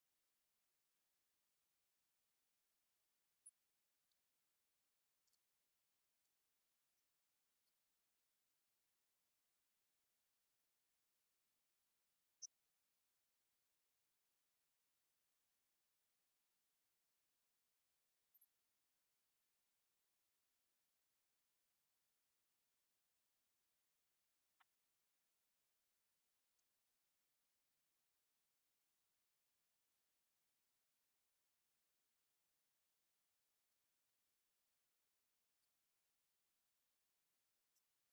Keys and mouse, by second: 1.8 space, 22.1-25.5 drag, 26.9 right click, 29.0 click, 30.6-31.6 drag, 32.7 click, 33.2 right click, 34.2 click.